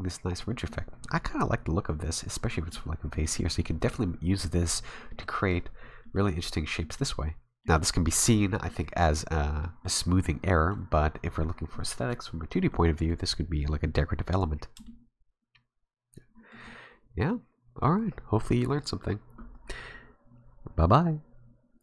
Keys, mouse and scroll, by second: 0.5 middle click, 2.2-2.5 scroll down 1, 2.5 middle click, 3.1 middle click, 5.1 middle click, 6.0 middle click, 6.8 middle click, 7.4 scroll down 1, 7.6 middle click, 7.9-8.3 scroll up 2, 8.3 middle click, 9.6 scroll up 1, 9.6 middle click, 10.5 scroll down 2, 11.7 middle click, 12.7 middle click, 14.5 scroll down 2, 14.8 shift+middle click, 14.9 shift+middle click.